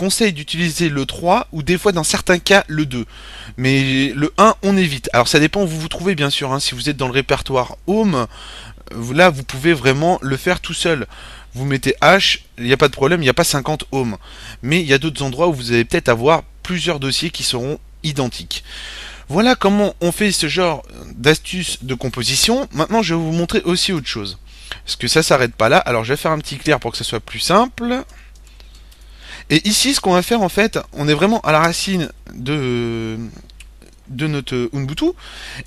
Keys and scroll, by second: 5.8-7.6 typing, 8.8-9.6 typing, 11.6-13.2 typing, 23.1-30.4 typing, 23.9 Return, 31.9 typing, 35.3-35.6 typing.